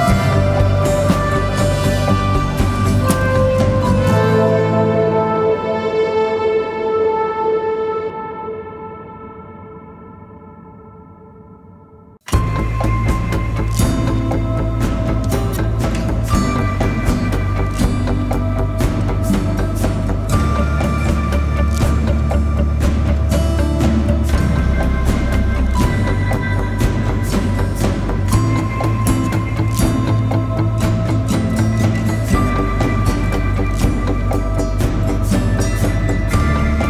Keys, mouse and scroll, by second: 0.8 double click, 2.0 right click.